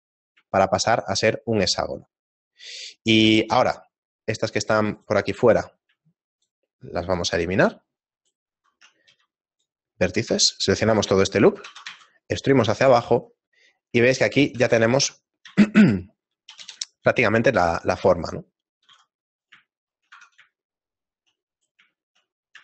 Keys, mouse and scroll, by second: 0.6 shift+middle click, 2.3 right click, 3.6 shift+right click, 4.0 shift+middle click, 5.4 shift+right click, 5.4 shift+middle click, 6.3 middle click, 6.8 shift+middle click, 6.8 shift+right click, 7.9 shift+right click, 8.3 shift+right click, 8.8 shift+middle click, 9.1 x, 10.4 alt+right click, 11.2 shift+middle click, 13.6 middle click, 13.6-14.3 scroll down 2, 13.6 e, 13.6 z, 14.3 shift+middle click, 14.3 scroll down 2, 14.5 s, 17.5 g, 18.8 g, 19.7 shift+middle click, 20.1 Tab, 20.6 shift+middle click, 21.5 right click, 22.0 shift+middle click, 22.4 middle click.